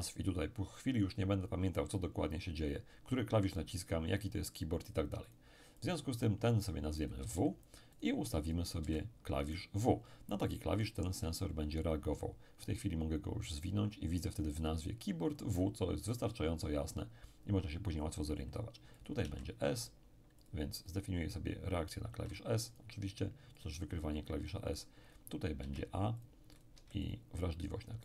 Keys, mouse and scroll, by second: 5.3-6.8 drag, 7.0-9.5 drag, 7.2 w, 8.8 w, 13.5 click, 19.0 click, 19.2 s, 20.4 click, 22.1 s, 22.7-24.6 drag, 25.1 click, 25.6 a, 26.2-28.0 drag.